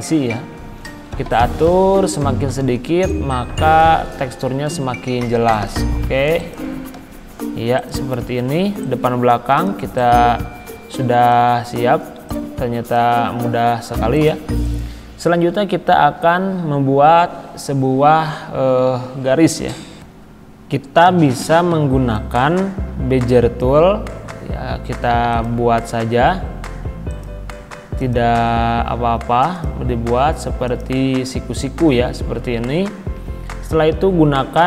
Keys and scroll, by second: 7.0 c, 12.1 z.